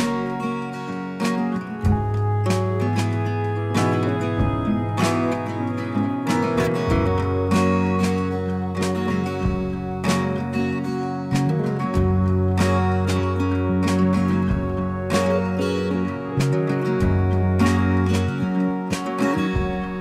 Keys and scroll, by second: 1.4 b, 6.7 ctrl+z, 19.4 ctrl+z.